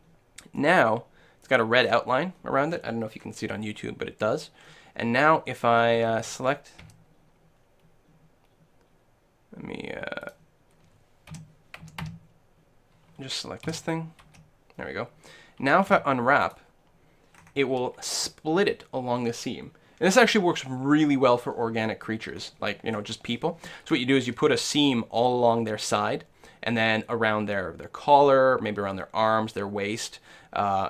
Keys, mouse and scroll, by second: 0.6-5.2 middle drag, 6.2 a, 6.8 a, 10.4-12.0 drag, 11.3 l, 11.8 a, 12.1 a, 13.7 l, 14.3 l, 15.9 u, 21.9 click, 22.4-24.6 middle drag, 24.6 click.